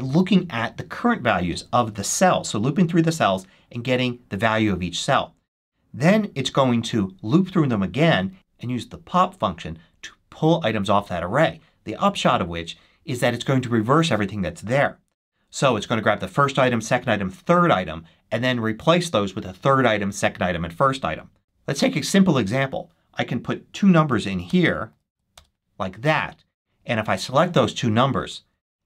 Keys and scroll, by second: 23.7-25.5 typing.